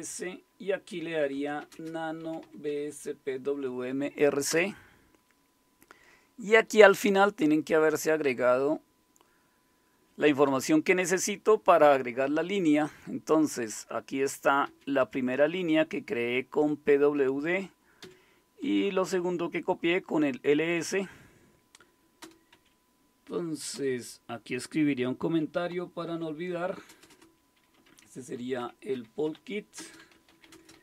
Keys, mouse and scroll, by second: 1.1-3.2 typing, 4.4-5.2 typing, 6.5-9.9 typing, 10.4 Up, 10.6 Up, 14.6 Down, 15.0 Up, 15.7 Right, 16.4-17.1 Right, 18.0 Down, 18.6 Left, 19.3-19.8 Left, 20.7 Up, 20.9 Up, 22.2 Return, 22.5 Up, 23.7 Return, 25.7 #, 26.9-30.8 typing.